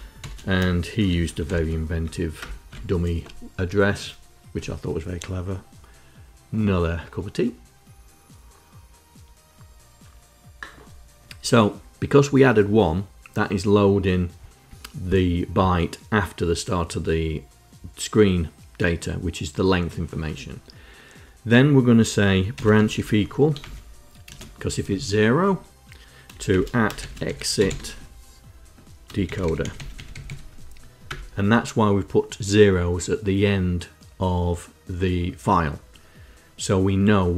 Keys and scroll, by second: 0.0-1.8 typing, 2.2 Return, 22.1-24.1 typing, 26.3 shift+;, 27.0 c, 27.3 i, 28.8-30.5 typing, 30.8 Return.